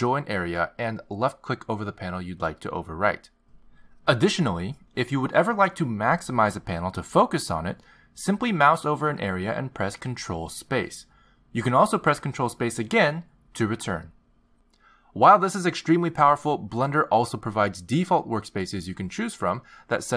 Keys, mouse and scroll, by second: 11.3 ctrl+space, 14.0 ctrl+space, 15.8 ctrl+space.